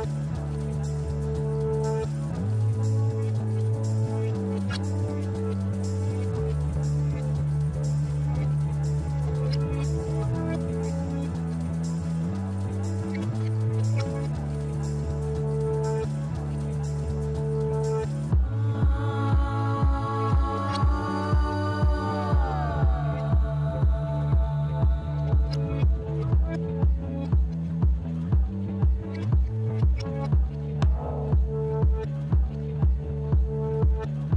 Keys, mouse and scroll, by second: 0.6 click, 4.0 right click, 7.1 click, 9.6-10.6 drag, 10.6 click, 12.2 click, 15.2 click, 19.8 click, 21.6 click, 24.2 click, 26.5 ctrl+a, 28.8 ctrl+c, 30.9 click, 33.4 ctrl+v.